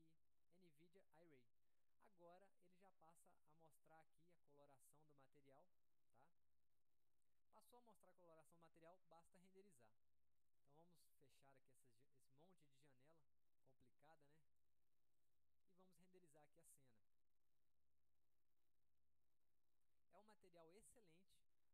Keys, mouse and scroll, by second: 10.7 click, 11.5 click, 12.7-13.3 drag, 13.9 click, 14.6 click, 15.4 click, 16.6 click.